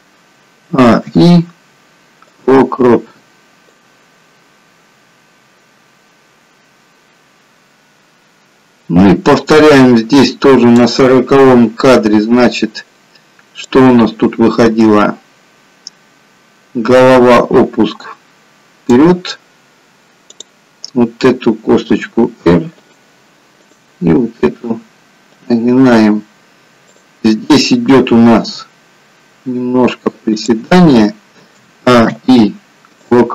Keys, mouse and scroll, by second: 0.6 r, 0.9 a, 1.2 i, 3.7 i, 4.0 click, 13.9 click, 20.4 click, 22.3 r, 23.7 click, 24.5 r, 27.0 click, 28.5 g, 31.7 a, 32.1 i.